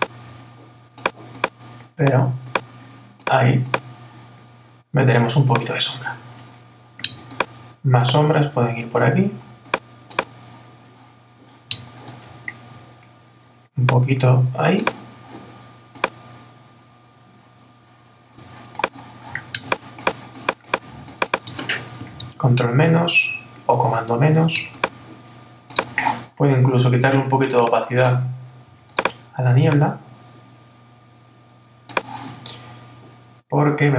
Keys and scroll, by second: 22.2 super+-.